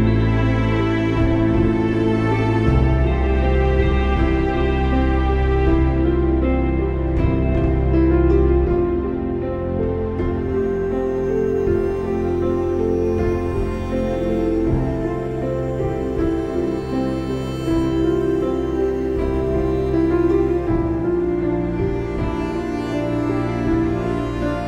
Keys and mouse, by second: 1.3 click, 2.3 click, 3.2 ctrl+-, 3.9 click, 4.2 space, 4.4 click, 4.6 space, 5.2 click, 5.3 space, 6.1 click, 10.5 alt+shift+click, 12.0 click, 12.3 click, 14.4 ctrl+-, 15.3 ctrl+=, 16.5 click, 18.7 shift+x, 20.8 v, 21.1 click, 23.7 space, 23.8 click, 24.0 space, 24.4 click, 24.5 space.